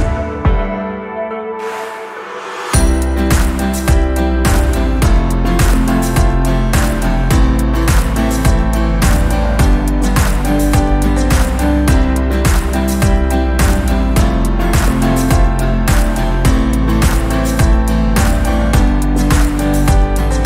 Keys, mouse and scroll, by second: 0.8-4.6 middle drag, 4.6-9.7 drag, 11.0 middle click, 11.6-13.0 drag.